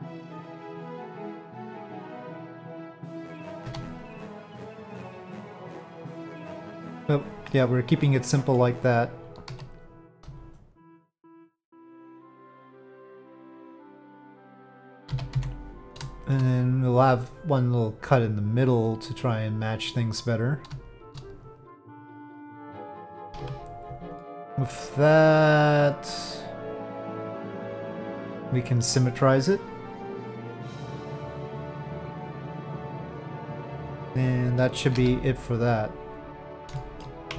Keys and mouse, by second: 1.5 middle click, 3.6 3, 3.8 click, 4.6-6.4 drag, 6.8 middle click, 8.0 middle click, 9.5 1, 10.4 shift+click, 11.3-13.1 drag, 13.5 middle click, 14.1 middle click, 15.1 z, 16.2 shift+middle click, 18.6 click, 19.8 click, 21.4-22.8 drag, 23.4 a, 24.2-28.8 middle drag, 30.0-31.6 drag, 32.1-33.8 middle drag, 36.0 click, 36.8 shift+middle click.